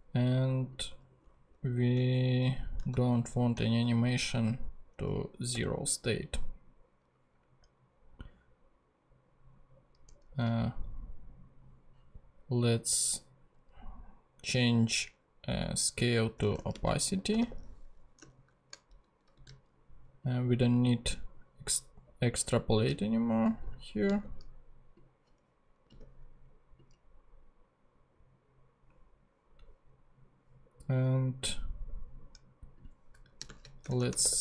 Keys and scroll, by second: 1.5 Left, 2.9 shift+super+Right, 3.2 shift+super+Left, 4.0 shift+Left, 5.5 0, 16.1-18.2 typing, 18.3 alt+shift+Left, 19.2 alt+shift+super+Left, 19.4 alt+shift+super+c, 24.1 super+c, 25.9 super+v, 33.4-34.4 typing.